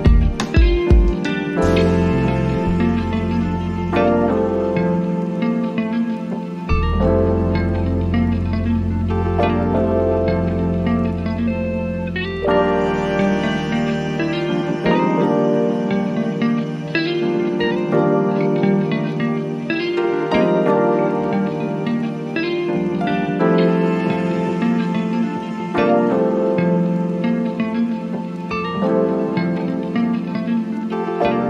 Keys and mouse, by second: 6.0-16.0 drag, 18.9-31.4 drag.